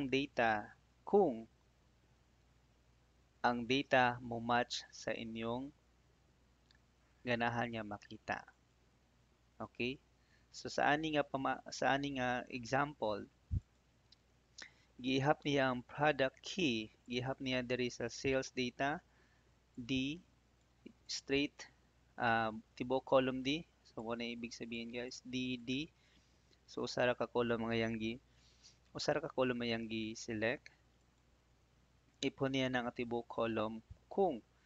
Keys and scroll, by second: 26.7 Escape.